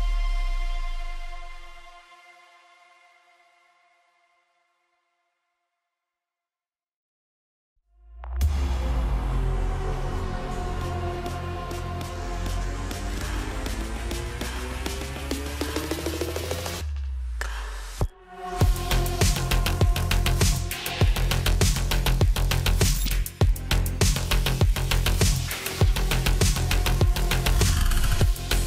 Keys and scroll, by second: 4.7 ctrl+a, 5.4 ctrl+a, 18.1-19.0 typing, 21.1-22.9 typing.